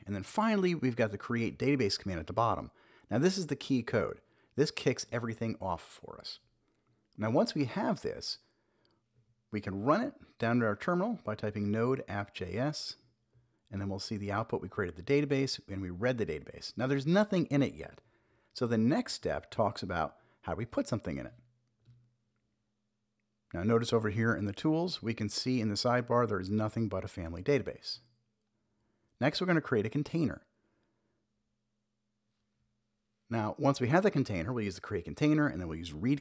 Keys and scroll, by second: 2.1 Return, 2.1-5.8 typing, 8.6 ctrl+`, 9.7-11.5 typing, 12.6 Return, 17.3 shift+super+e, 25.2 Return, 26.0 super+b, 27.4 super+j, 31.6 Return, 32.0 super+v.